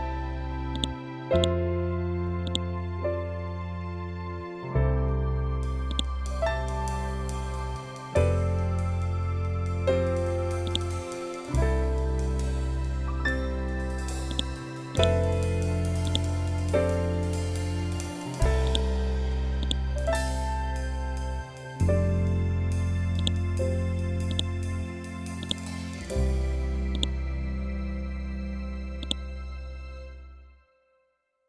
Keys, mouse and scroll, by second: 0.2-5.4 drag, 5.4 right click, 10.1 click, 13.7 click, 15.5-18.1 ctrl+drag, 19.1-31.4 ctrl+drag.